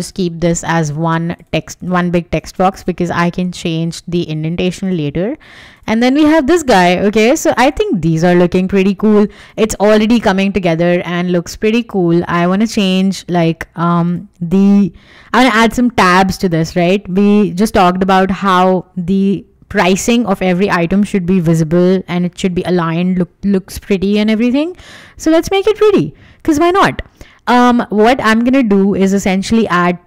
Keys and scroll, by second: 0.5 Escape, 5.2 Escape, 9.2 w.